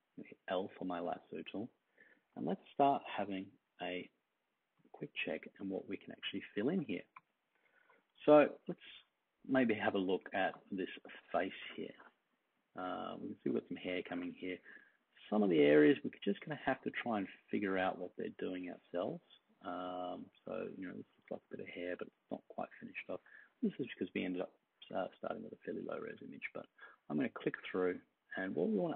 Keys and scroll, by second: 3.2 super+=, 3.6 super+=, 5.4-6.5 space, 7.7 super+=, 8.1-9.8 space.